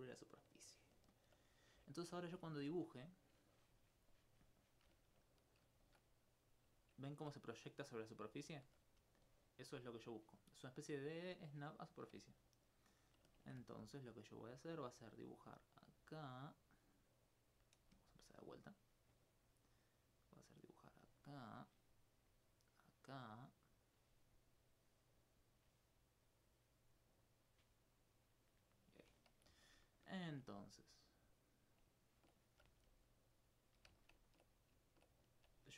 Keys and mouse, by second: 1.2 alt+click, 2.0 alt+click, 2.8 click, 3.3 click, 3.6 click, 4.2 click, 5.2 alt+click, 7.3 alt+click, 8.5 alt+click, 9.1 right click, 12.3 alt+click, 13.0 alt+click, 13.4 ctrl+alt+click, 14.4 click, 18.1 right click, 19.2 right click, 19.5 right click, 20.2 click, 22.6 click, 24.8 d, 26.3 d, 26.6 d, 28.1 click, 29.8 alt+click, 29.8 alt+s, 33.3 right click, 34.0 alt+click, 34.2 alt+c.